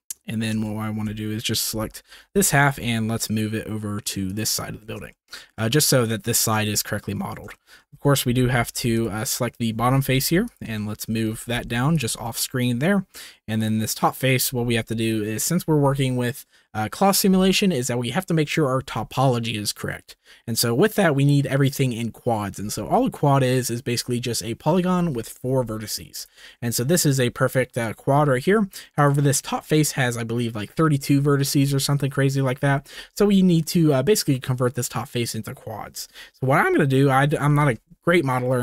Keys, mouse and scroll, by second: 0.8 shift+middle click, 1.7 g, 2.0 x, 2.5 y, 4.2 click, 4.9 shift+middle click, 6.8 shift+middle click, 7.5 shift+middle click, 8.2 alt+z, 8.9 click, 10.0 g, 10.1 z, 10.7 shift+middle click, 11.3 g, 11.3 z, 12.2 shift+middle click, 12.7 middle click, 14.3-25.6 middle drag, 25.9 middle click, 26.6 shift+middle click, 28.4 middle click, 29.0 middle click, 29.5 shift+middle click, 37.5 shift+middle click.